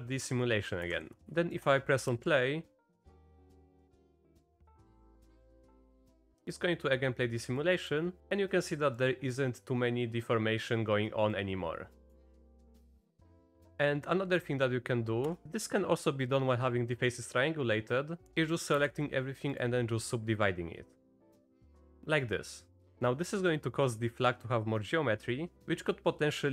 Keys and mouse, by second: 0.9 shift+Left, 1.2 click, 1.4 shift+click, 2.1 space, 5.3-6.1 drag, 7.6 click, 9.1 middle click, 11.3-12.1 middle drag, 12.9-13.4 middle drag, 15.2 Tab, 18.7 a, 19.6-21.3 drag.